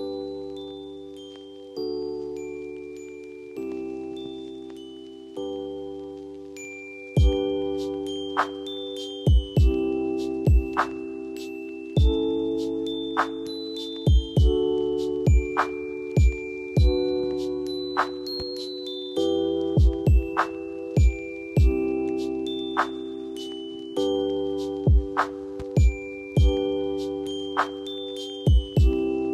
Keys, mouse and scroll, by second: 12.8 ctrl+alt+shift+e.